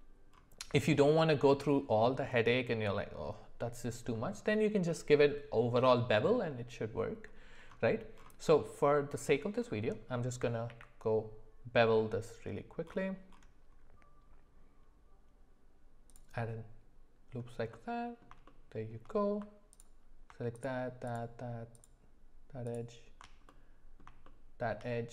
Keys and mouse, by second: 2.3 middle click, 4.1 middle click, 8.6 middle click, 10.7 ctrl+b, 17.7 middle click, 18.5 shift+middle click, 19.8 alt+click, 20.5 alt+shift+click, 21.0 alt+shift+click, 21.7 alt+shift+click, 22.6 alt+shift+click, 23.5 middle click, 24.2 shift+middle click.